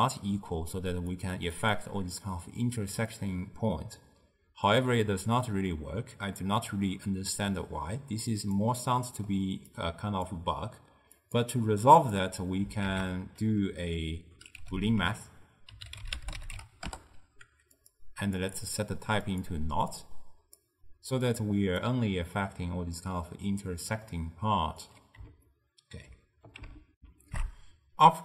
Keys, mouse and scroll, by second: 1.6 click, 3.2-6.2 drag, 8.9-9.8 middle drag, 9.8 click, 11.3-12.9 drag, 12.9 ctrl+a, 15.0 o, 18.4-20.1 drag, 21.4 click, 22.4-25.4 drag, 25.5-27.0 ctrl+middle drag, 27.0 n, 27.3 ctrl+alt+shift+q.